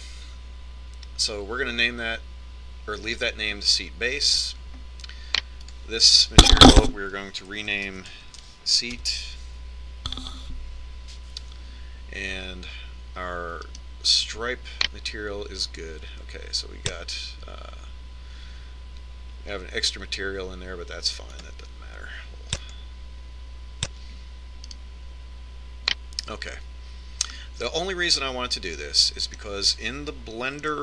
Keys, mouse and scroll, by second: 5.3-6.6 right drag, 6.6-7.8 middle drag, 7.8 click, 14.7 right click, 18.3 click, 23.7-25.5 drag, 25.8 right click, 28.5-30.8 middle drag.